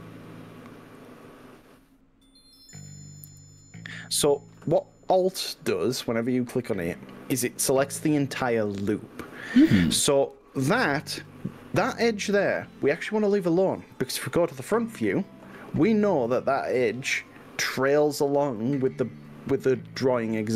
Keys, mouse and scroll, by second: 1.0 alt+click, 2.6 alt+click, 16.5-20.5 middle drag.